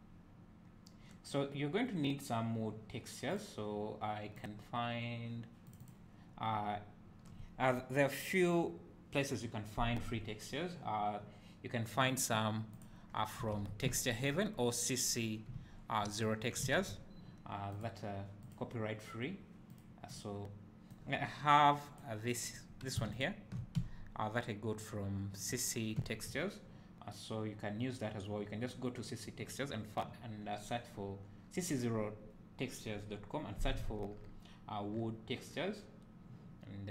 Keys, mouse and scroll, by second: 13.1 scroll down 1, 14.0 `, 15.6 `, 22.6 click, 23.2 ctrl+shift+click, 23.9 `.